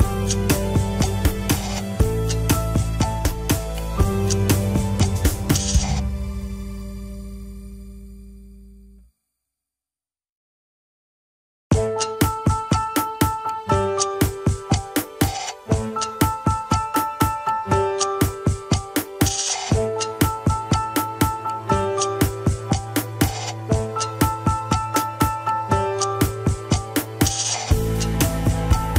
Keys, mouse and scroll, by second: 0.0 g, 0.5 scroll down 2, 0.8 alt+z, 1.7-2.6 scroll up 1, 2.6 click, 2.8 g, 4.3 click, 4.6 g, 5.0 KP_3, 5.3 g, 6.1 click, 6.8 KP_3, 7.2 shift+middle click, 7.3 scroll up 2, 7.7 g, 8.5 scroll down 2, 8.7 shift+middle click, 9.2 scroll down 2, 9.6 click, 10.2 click, 10.6 scroll down 4, 11.4-12.1 scroll up 4, 11.5 KP_1, 11.9 shift+middle click, 13.1 click, 14.3 g, 15.3 click, 15.8 g, 16.5 click, 16.7 g, 18.2 click, 18.5 g, 19.3 ctrl+z, 19.8 click, 20.2 g, 23.0 scroll up 3, 23.1 alt+z, 23.3 click, 23.7 shift+middle click, 24.2 g, 24.6 alt+z, 25.3 KP_3, 26.1 g, 27.4 KP_1, 27.9 g, 28.5-28.9 scroll down 3, 28.7 shift+middle click.